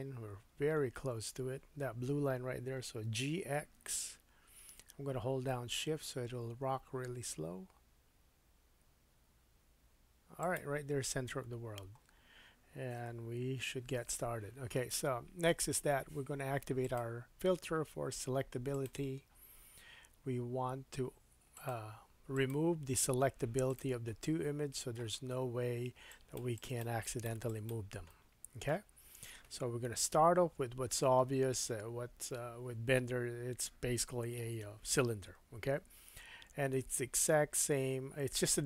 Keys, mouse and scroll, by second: 3.1 scroll up 1, 3.1 g, 10.5-12.1 shift+middle drag, 11.3-12.4 scroll down 6, 16.8-21.7 drag, 22.3 click, 23.7 click, 24.1-24.7 scroll down 2, 24.4-26.1 middle drag, 26.1-30.9 drag, 28.1 middle click, 29.8 KP_1, 30.6-31.1 scroll up 5.